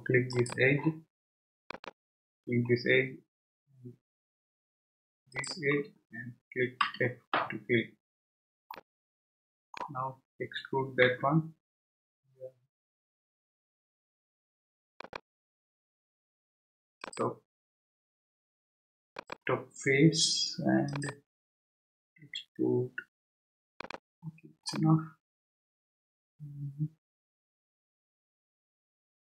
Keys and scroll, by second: 6.8 f, 11.0 e, 22.2 e.